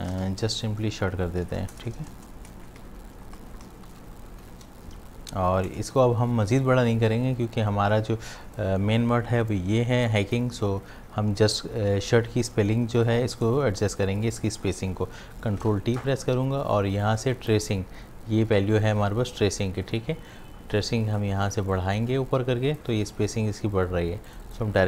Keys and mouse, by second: 0.0-0.9 typing, 2.5 Caps_Lock, 2.9-4.4 typing, 5.7 Caps_Lock, 15.6 ctrl+t, 17.0-21.7 drag, 21.7-24.3 drag.